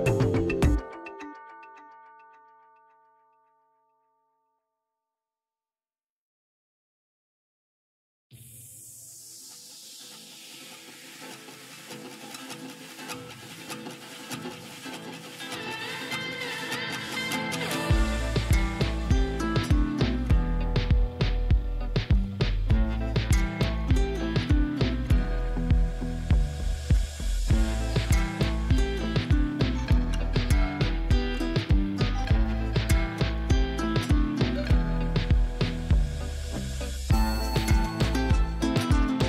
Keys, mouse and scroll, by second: 0.2 scroll down 1, 0.5 j, 1.5-2.7 drag, 6.2 right click, 6.9 click, 8.2-8.9 typing, 9.1 click, 11.0 ], 11.2 ], 11.4 ], 12.1 click, 16.7 [, 16.9 [, 17.1 [, 17.3 click, 24.8 ], 25.1 ], 25.3 ], 25.7 click, 30.8 scroll up 1, 32.5-34.3 drag, 38.6 scroll up 1.